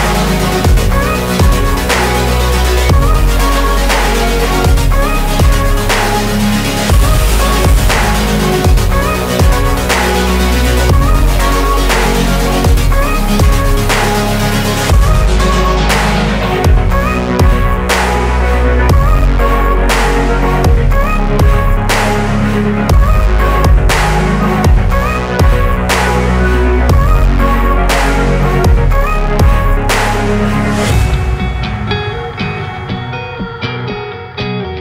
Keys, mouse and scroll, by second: 0.4 s, 0.9-1.2 middle drag, 1.2-1.6 scroll up 4, 1.6-1.9 middle drag, 1.9 g, 2.9 shift+click, 3.8 scroll up 1, 3.8 scroll down 2, 3.9-4.2 middle drag, 4.2 scroll up 1, 4.3 shift+middle drag, 4.5 click, 4.7 Tab, 4.7 middle click, 5.4 3, 5.5 click, 5.8 click, 5.9 middle click, 6.9 g, 8.6-9.1 middle drag, 9.1 shift+click, 9.3 KP_0, 10.4 KP_3, 10.7 scroll up 3, 10.9-11.4 shift+middle drag, 11.4 shift+a, 13.0 r, 14.1 r, 14.9 s, 16.5 scroll up 2, 16.7 Tab, 17.4 Tab, 18.0 click, 18.4 click, 19.2-20.7 drag, 23.7-24.2 scroll up 2, 24.2-25.1 shift+middle drag, 25.1 Tab, 25.7 Left, 25.8 Left, 26.6 Left, 26.6 BackSpace, 26.7 BackSpace, 26.9 Tab, 28.0 scroll down 2, 28.2 s, 28.6 middle click, 28.8 scroll down 2, 29.1 g, 30.7 click, 31.5 g, 33.0 shift+click, 33.9 middle click, 34.2 scroll up 1, 34.7 Tab.